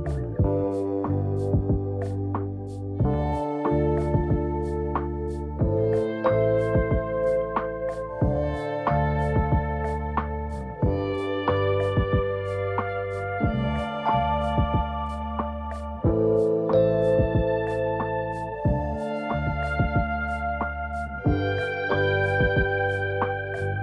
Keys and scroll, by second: 2.5 ctrl+z, 22.5 ctrl+t.